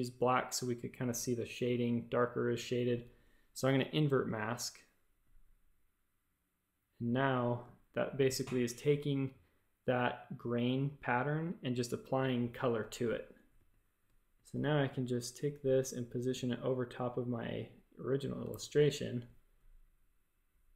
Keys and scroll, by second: 13.5 space, 14.5 a, 18.4 shift+super+a.